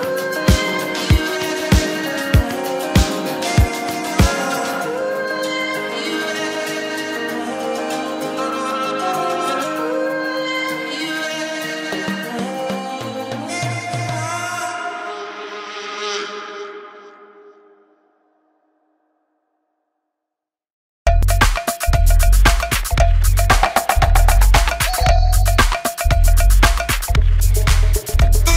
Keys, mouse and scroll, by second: 5.3 shift+middle click, 8.6 Escape, 10.2 shift+v, 11.6 shift+v, 18.8 space, 19.8 space, 20.7 shift+v, 23.1 space, 23.2 Escape, 23.4 Escape.